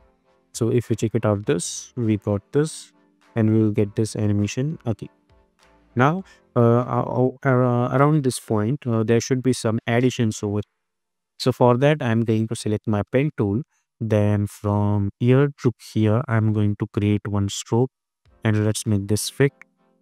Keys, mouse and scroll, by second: 4.9 space, 6.2-7.4 drag, 8.7 u, 12.4 click, 13.2-14.5 scroll down 1, 15.1 click.